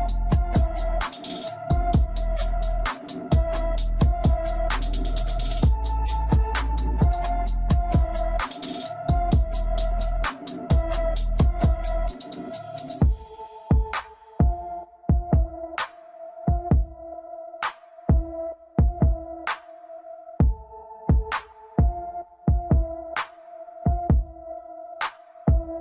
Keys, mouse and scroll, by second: 0.7 click, 0.9 scroll down 2, 1.1-2.1 scroll up 2, 2.1 click, 4.6-5.4 scroll down 5, 5.4-6.6 middle drag, 6.6-7.1 scroll down 3, 7.1-8.2 middle drag, 8.2-8.7 scroll down 2, 8.7-9.2 scroll up 3, 9.2-10.0 middle drag, 10.0 scroll up 1, 10.6 click, 11.8 click, 14.8-17.0 drag, 19.7 scroll down 1, 20.3-21.0 middle drag, 21.0 scroll down 1, 21.2 drag, 21.5-22.8 middle drag, 22.9 shift+middle click, 23.1-23.4 scroll up 3, 23.4-24.0 scroll down 4, 24.0 click, 24.2-25.8 middle drag.